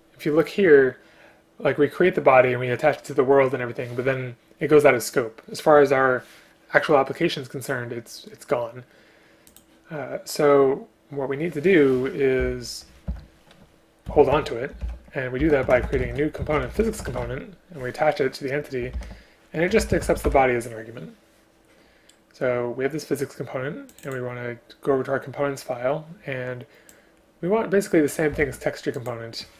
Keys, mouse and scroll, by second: 13.1 Return, 28.5 ctrl+c.